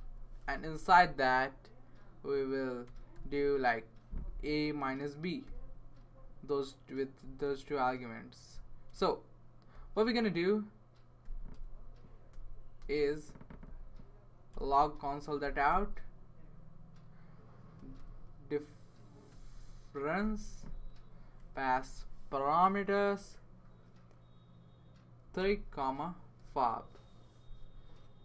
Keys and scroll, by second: 0.4 shift+9, 2.8 typing, 5.4 b, 7.5 space, 8.9 space, 11.2 ;, 11.5 Return, 12.3 BackSpace, 12.8 BackSpace, 13.6 Down, 14.5 Return, 14.7 Return, 15.4 typing, 15.7 Return, 17.5-19.8 typing, 20.2 Return, 21.1-21.9 typing, 23.0 Left, 25.0-26.9 typing.